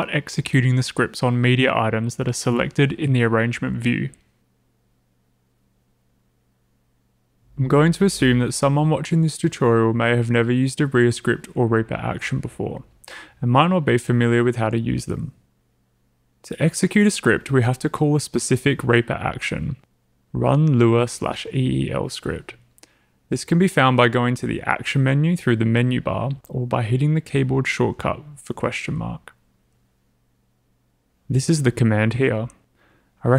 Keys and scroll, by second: 29.3-31.6 typing.